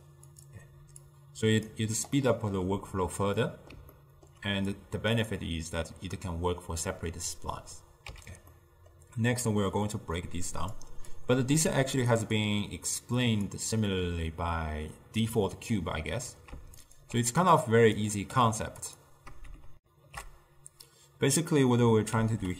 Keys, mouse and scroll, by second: 1.1-2.3 drag, 2.3-3.8 middle drag, 3.8 scroll down 1, 4.0 ctrl+scroll up 1, 4.0-4.8 ctrl+middle drag, 4.8-7.8 drag, 8.1 x, 8.6-9.9 middle drag, 9.9 click, 11.2-11.7 drag, 11.7 g, 12.3 click, 13.1 click, 16.9 alt+shift+click, 17.6-18.4 drag, 18.4 g, 19.8 ctrl+alt+shift+w, 22.3 ctrl+a.